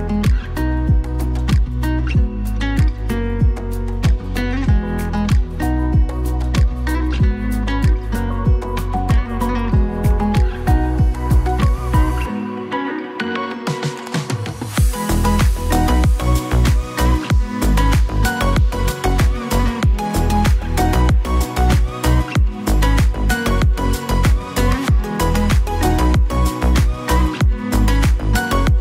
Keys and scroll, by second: 1.2 ctrl+z, 1.9 ctrl+z, 9.2 ctrl+z, 16.6 ctrl+z, 19.1 ctrl+z, 21.2 ctrl+z, 21.7 ctrl+z, 22.1 ctrl+z, 23.0 ctrl+z.